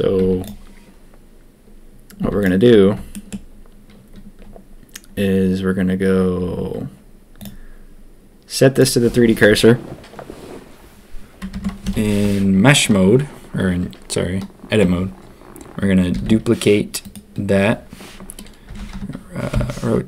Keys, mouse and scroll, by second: 0.2 z, 2.2 z, 3.1 shift+drag, 7.3-8.8 drag, 11.5 Tab, 11.8 a, 16.1 shift+d, 19.9 r.